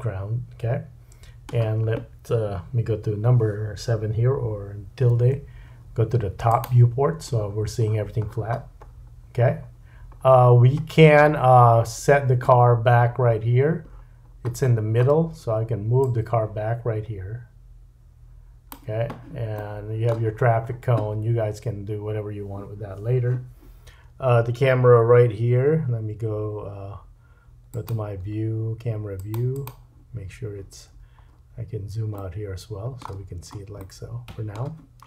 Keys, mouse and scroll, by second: 5.1 `, 7.3-8.8 scroll down 9, 7.5-16.0 middle drag, 8.8-10.1 scroll up 7, 10.1-13.9 scroll up 6, 13.9-16.0 scroll down 9, 16.0-27.8 drag, 19.6 middle click, 20.3-21.7 scroll up 6, 25.4 n, 25.8 n, 29.1 click, 29.5 click, 30.7 n, 31.3-32.1 scroll down 3, 32.1 middle click, 33.2-33.8 scroll up 2, 33.8 shift+middle click.